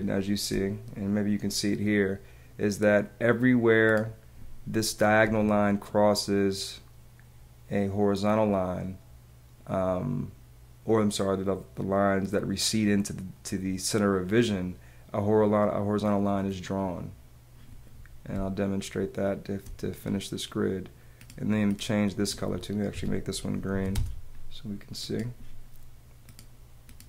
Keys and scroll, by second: 0.1 space, 5.2 Escape, 18.3 space, 22.9 Escape, 24.0 space, 24.8 space.